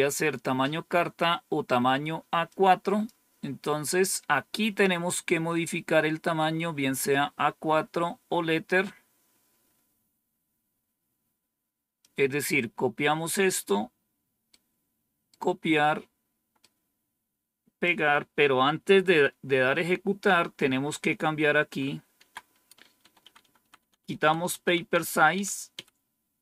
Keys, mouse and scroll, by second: 2.3 click, 11.9-13.6 drag, 14.4 right click, 16.4-17.7 right drag, 19.4 Tab, 20.1-21.6 Left, 22.1 Left, 22.9 Delete, 23.1 Delete, 23.3 Delete, 23.5 Delete.